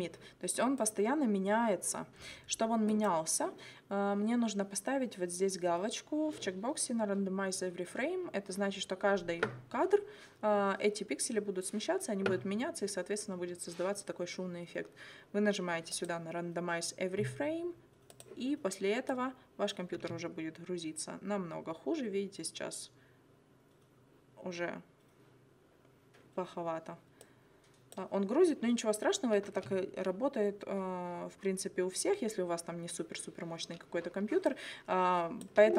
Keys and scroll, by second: 20.0 space, 29.5 space, 35.6 space.